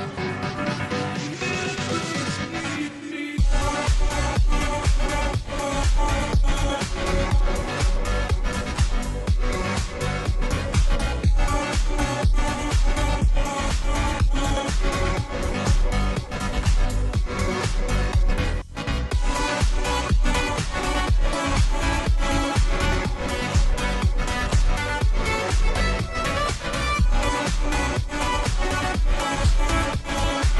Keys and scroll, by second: 26.0 space, 26.5 space, 27.5 space, 28.9-30.5 typing.